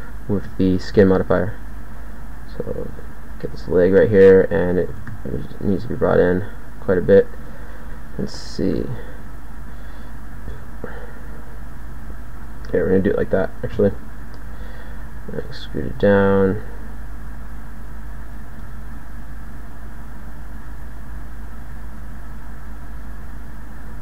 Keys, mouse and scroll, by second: 0.5 g, 4.9 g, 8.7 g, 10.3 e, 13.7 KP_1, 15.3 e, 18.6 g, 20.1-21.6 drag, 21.6 g, 22.3 click, 23.3 click, 23.9 g.